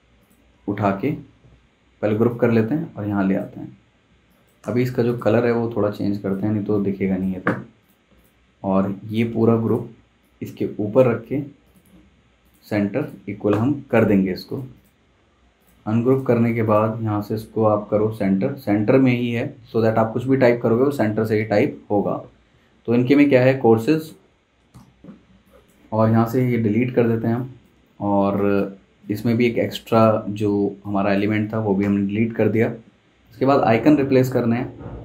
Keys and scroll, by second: 1.4 super+g, 4.1 z, 4.6 v, 21.2 Escape, 21.3 `, 24.7 c, 26.4 BackSpace, 29.1 super+z, 29.6 super+z, 31.8 BackSpace.